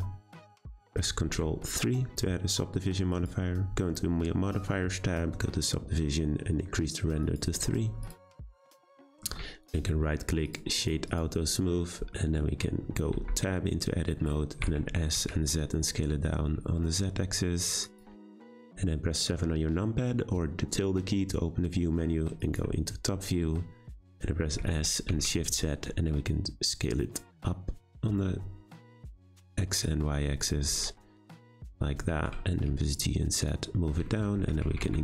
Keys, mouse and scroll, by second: 1.2 ctrl+3, 3.1 click, 7.2 click, 9.1-9.6 shift+middle drag, 9.6-10.8 right drag, 10.8 click, 11.1 click, 11.7-13.1 middle drag, 13.1 Tab, 14.6 s, 24.6 s, 30.8 middle click, 31.6 Tab, 32.0 g, 34.1-34.4 shift+middle drag, 34.4 Tab, 34.6 a, 34.7 s.